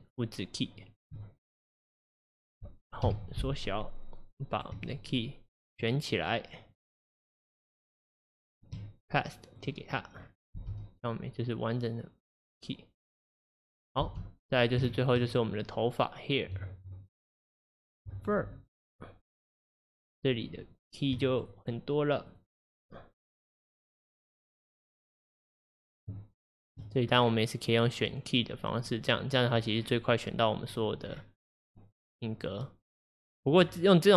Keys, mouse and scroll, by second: 0.9-3.1 shift+drag, 3.1 Home, 4.6-10.2 shift+drag, 10.2-10.6 scroll down 1, 10.6 space, 14.1 space, 14.6-14.9 scroll down 3, 14.9-17.6 shift+middle drag, 17.6 click, 17.9 click, 18.3 click, 18.9 click, 20.8-27.2 drag, 27.2-28.0 scroll down 1, 29.6-30.7 drag, 29.6-30.7 scroll down 6, 30.7-32.0 scroll down 5, 30.8 click.